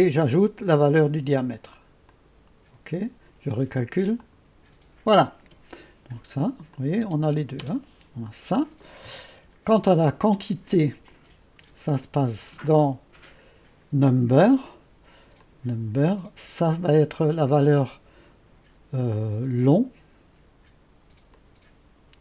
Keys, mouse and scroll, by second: 2.1 click, 4.1-4.8 typing, 4.2 click, 6.8 click, 7.1-7.7 typing, 11.1 click, 12.7-13.8 drag, 15.5 click, 21.4-22.2 drag.